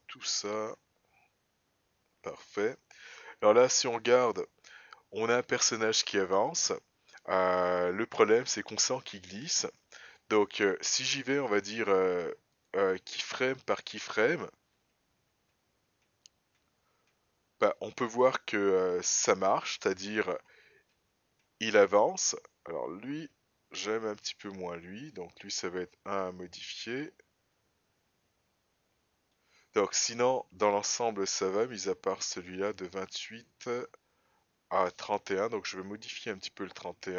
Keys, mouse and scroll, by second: 1.8-3.3 scroll down 1, 3.8 click, 4.6 space, 10.3 space, 11.6 click, 13.7 click, 15.4 Up, 15.9 Up, 17.0 Up, 18.5 click, 19.8 Up, 20.4 Up, 20.9 Up, 21.4 Up, 21.9 Up, 22.5 Up, 23.0 Down, 23.3 Down, 23.8 Up, 24.3 Down, 24.7 Up, 25.1 Up, 25.6 Down, 26.1 Down, 26.6 Up, 27.2 Down, 27.6 Up, 28.0 Up, 28.9 Up, 29.4 Up, 29.9 Down, 30.1 Down, 30.4 Down, 31.1 Down, 31.9 Up, 34.1 Up, 36.1 Down, 36.7 Up.